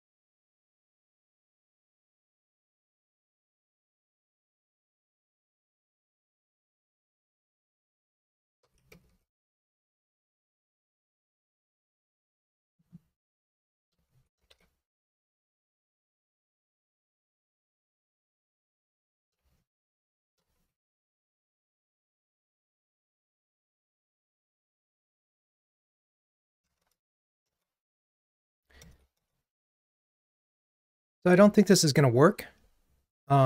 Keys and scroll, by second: 0.8 super+z, 6.6 Return, 9.6 Return, 9.7 Tab, 14.5 super+c, 17.2 super+v, 21.4 super+BackSpace, 26.7 alt+Return.